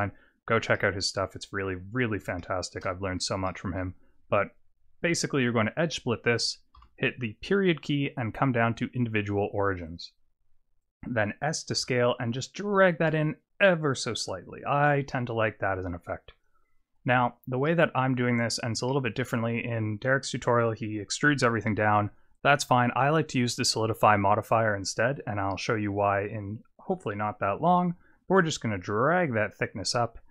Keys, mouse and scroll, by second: 0.7 middle click, 2.4 shift+middle click, 3.0 scroll down 1, 3.5 middle click, 11.7 s, 15.1 middle click, 17.1 Tab, 17.7 middle click, 18.4 click, 18.9 middle click, 22.0 click, 23.0 click, 28.2 click.